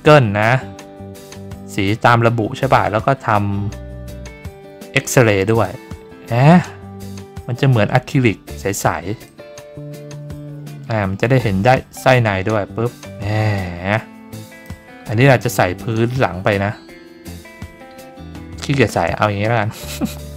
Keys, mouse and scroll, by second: 5.4 click, 9.2-14.6 drag.